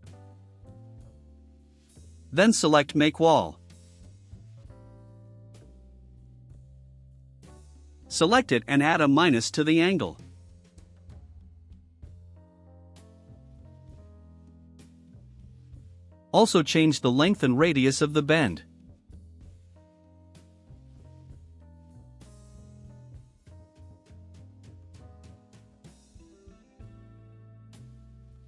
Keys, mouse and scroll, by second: 4.4 click, 8.0 click, 10.0 click, 11.1-12.5 typing, 13.9 click, 17.9 3, 18.4 0, 19.8 click, 23.4 2, 25.8 click.